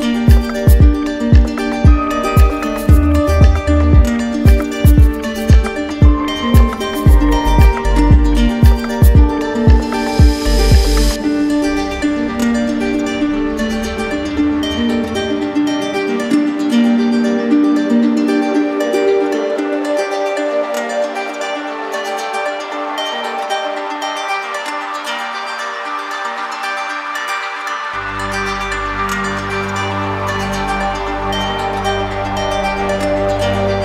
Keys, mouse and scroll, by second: 3.0 alt+click, 4.8 click, 5.3-6.4 ctrl+drag, 9.2-11.4 right drag, 11.6-12.9 right drag, 13.5 right click, 14.6 z, 15.8 click, 16.8 right click, 18.3 click, 19.2 click, 19.8-20.9 drag, 24.5-25.6 drag, 26.1 right click, 27.0-28.1 drag, 28.6-29.7 right drag, 29.8 click, 32.3 click, 33.2 right click, 33.6 shift+right click.